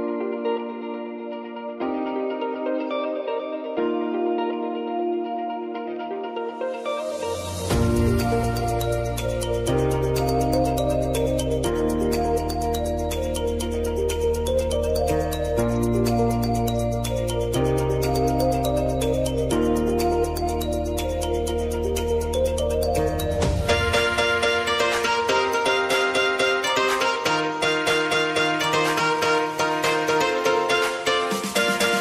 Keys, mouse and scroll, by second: 0.7 click, 1.0 space, 3.2 space, 5.2 click, 5.6 u, 7.3 ctrl+0, 9.1 click, 9.8 ctrl+d, 10.6-25.1 drag, 25.1 ctrl+alt+Home, 26.8-32.0 drag.